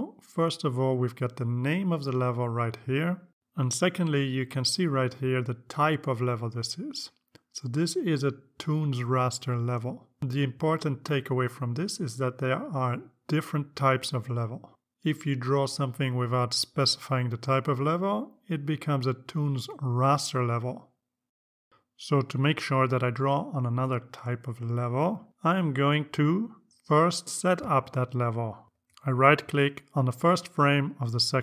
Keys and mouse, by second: 0.8 click, 15.4 click, 27.2 click, 28.5 right click.